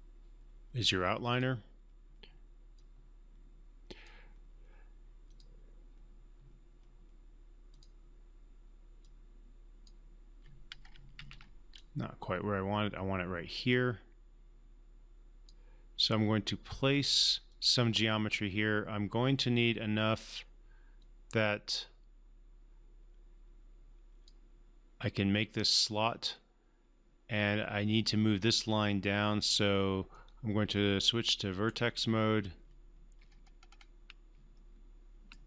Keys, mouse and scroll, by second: 1.3-4.3 drag, 7.7-10.0 drag, 11.1 ctrl+z, 13.7-15.6 drag, 30.1-31.6 right drag, 33.3 alt+scroll up 1, 34.6-35.4 alt+middle drag.